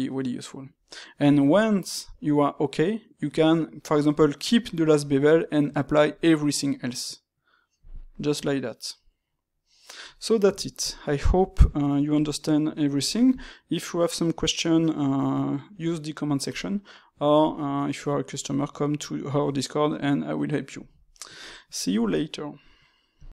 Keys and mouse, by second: 9.6-15.2 middle drag, 21.5-23.4 middle drag.